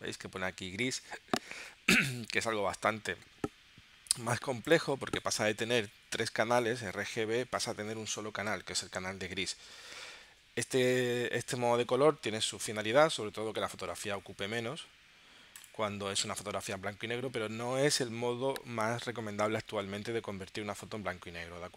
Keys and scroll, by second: 12.9 super+z.